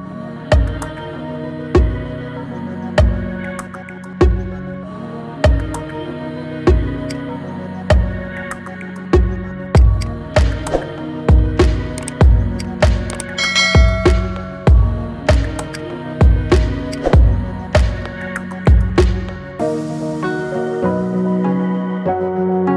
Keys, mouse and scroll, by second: 0.2-1.4 scroll up 2, 1.4-3.8 middle drag, 3.8 KP_1, 4.6 r, 10.1 click, 10.3-11.1 scroll down 4, 11.1-11.4 scroll down 1, 11.4-11.9 scroll up 9, 11.9-12.7 middle drag, 12.7 click, 13.0-13.3 scroll down 3, 13.3 middle click, 14.1 r, 16.2 scroll down 4, 16.4-17.1 middle drag, 17.1 click, 17.3 scroll up 4, 17.6-19.5 middle drag, 19.5 scroll down 3, 19.7-22.7 middle drag.